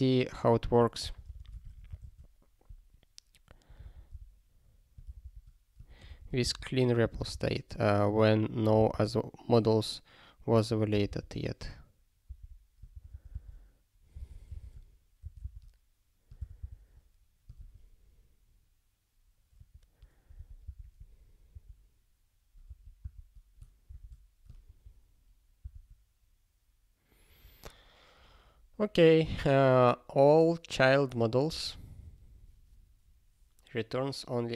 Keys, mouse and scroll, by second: 1.0 ctrl+n, 1.2 ctrl+space, 1.6 alt+;, 2.1 ctrl+s, 5.2 ctrl+c, 6.0 alt+p, 6.4 Return, 7.2 super+b, 8.8 super+b, 8.9 super+b, 11.1 super+b, 13.4 super+b, 14.2 alt+x, 15.4 Return, 16.3 Return, 20.3 super+o, 20.7 super+b.